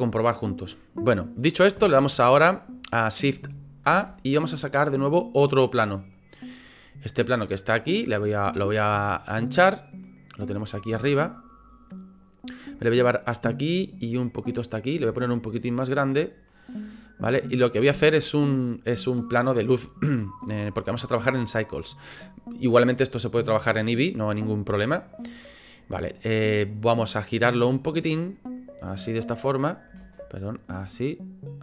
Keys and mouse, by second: 3.8 shift+a, 7.5 click, 8.7 s, 10.0 click, 10.8 s, 12.6 click, 14.3 click, 15.0 s, 15.8 click, 16.4 click, 27.7-29.6 drag, 30.0 ctrl+z, 30.6-31.6 drag.